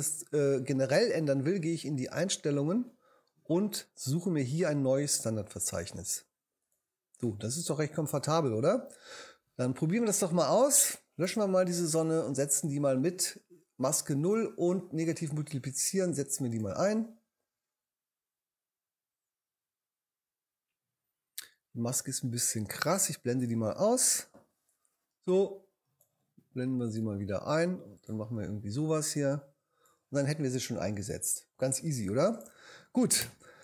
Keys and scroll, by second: 11.2 BackSpace, 24.0 shift+v, 25.0 v, 33.2 shift+BackSpace.